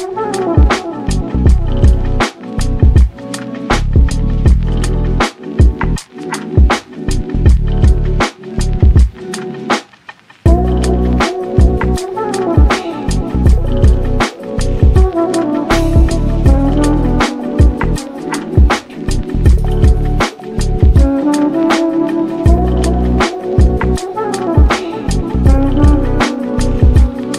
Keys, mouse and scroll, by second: 0.2-1.2 scroll up 7, 0.5 shift+middle click, 1.2 shift+middle drag, 1.5 click, 1.8 Tab, 2.1 middle click, 3.0 ctrl+r, 4.1 3, 4.2-4.8 scroll up 1, 4.8 click, 5.1 scroll up 1, 5.1 middle click, 5.6 shift+click, 5.9-6.5 scroll down 7, 6.5-7.3 scroll up 13, 7.3-9.3 drag, 9.3 Tab, 9.4-9.8 scroll down 6, 9.8-11.0 shift+middle drag, 11.0-11.9 scroll up 9, 11.9 click, 12.2 Tab, 12.4 scroll up 1, 12.8 click, 13.6 ctrl+r, 14.4 3, 14.6 click, 15.0 click, 15.3 shift+click, 15.4 shift+click, 16.2-17.9 drag, 17.9 Tab, 17.9-18.4 scroll down 8, 18.4-19.0 scroll up 7, 19.0-19.5 middle drag, 19.5 s, 21.1 g, 22.8-23.1 scroll down 11, 23.1 scroll up 1, 23.2-23.7 middle drag, 23.7 click, 23.9 scroll down 2, 24.1 shift+middle click, 24.4 ctrl+s, 24.9 click, 25.3 shift+middle click, 26.0-26.8 drag.